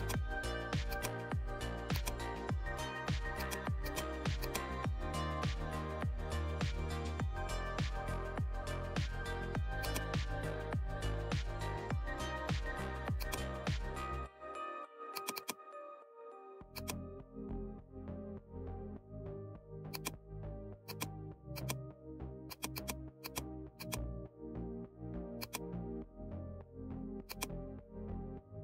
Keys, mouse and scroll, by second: 3.4-28.6 drag.